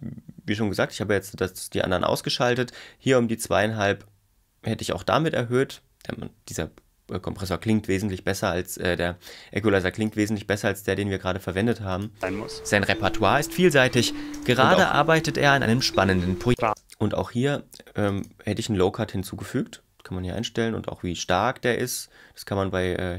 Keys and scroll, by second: 12.2 space, 14.4 space, 16.7 space.